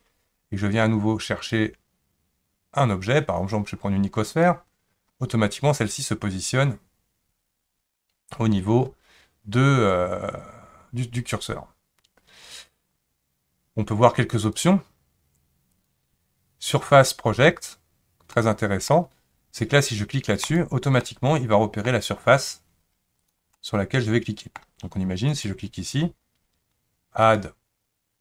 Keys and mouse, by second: 1.5-4.5 drag, 14.5 click, 18.3 middle click, 20.5 click, 21.0-21.9 middle drag, 23.2 click, 23.5-24.6 middle drag, 25.3 click, 27.2-28.2 drag.